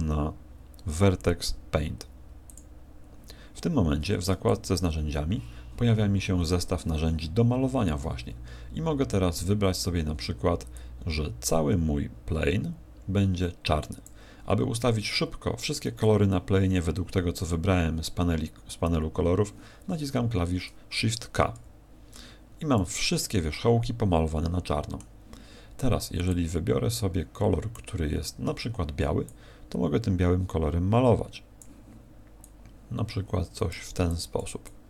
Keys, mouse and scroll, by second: 4.7 t, 5.0 t, 10.7 click, 20.0 k, 21.5 shift+k, 22.7 middle click, 26.2 click, 29.2 click, 32.4 click, 34.0 click, 34.6 click.